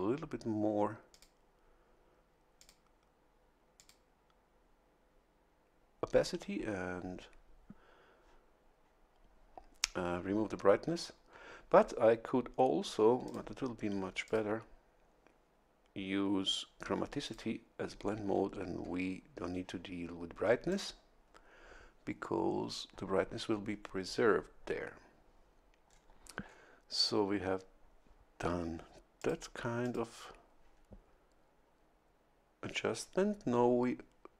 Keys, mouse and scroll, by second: 1.1 click, 2.5 click, 3.7 click, 13.2 click, 14.2 click, 17.2 click, 20.7 click, 25.8-26.1 scroll down 1, 26.4 scroll down 1, 29.1 click, 29.8 click.